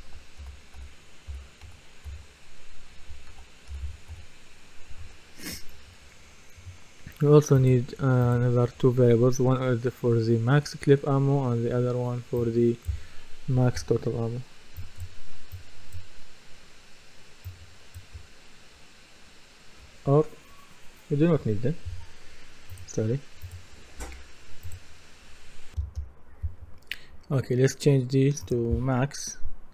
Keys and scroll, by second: 1.4-4.6 typing, 5.0 Return, 25.8 F10.